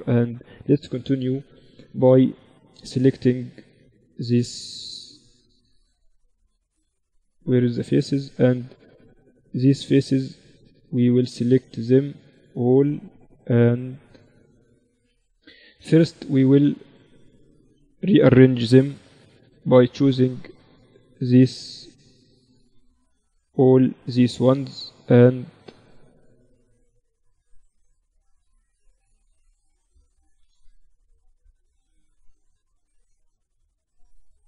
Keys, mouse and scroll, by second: 0.0 click, 0.2 click, 0.4 z, 1.4 Tab, 1.8 z, 3.3 z, 6.1 z, 6.6 z, 8.1-9.8 drag, 8.3 z, 9.1-11.7 right drag, 10.1 z, 11.7 z, 12.3 click, 13.0-14.9 right drag, 13.0 z, 14.9 z, 16.8-18.6 drag, 17.0 z, 17.6 a, 18.9 b, 21.1 right click, 21.2-22.8 drag, 22.5 ctrl+z, 22.8 a, 23.5 b, 25.1-27.0 drag, 27.5-29.5 drag, 28.5-30.0 middle drag, 28.5 right click, 28.8 z, 29.5 z, 31.1 middle click, 31.1 z, 31.7 a, 33.1 a, 33.7 a.